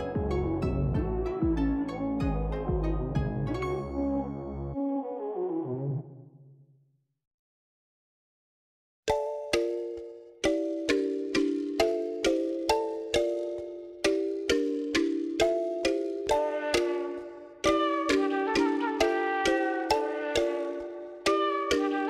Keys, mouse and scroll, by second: 1.5 shift+middle click, 2.4 shift+middle click, 2.6 shift+middle click, 4.3-6.0 shift+drag, 6.9-7.5 shift+drag, 7.7 scroll down 1, 8.8-11.5 shift+drag, 12.2 shift+click, 16.7 shift+click, 20.1 shift+middle click, 20.8-21.3 shift+middle drag.